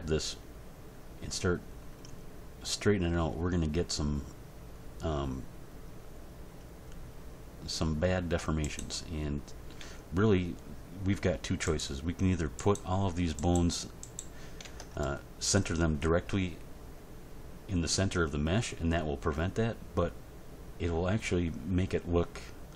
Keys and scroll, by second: 9.8 g, 14.6 Tab.